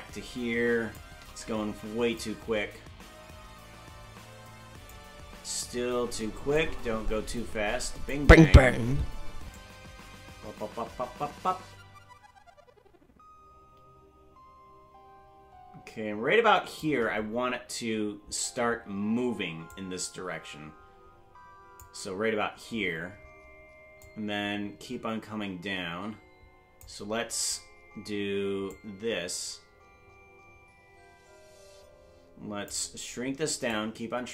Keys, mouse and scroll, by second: 2.2-4.9 drag, 6.5-8.1 shift+drag, 9.6-16.9 drag, 19.7-21.9 drag, 24.1-26.9 drag, 28.7-32.7 drag, 33.7-34.3 drag.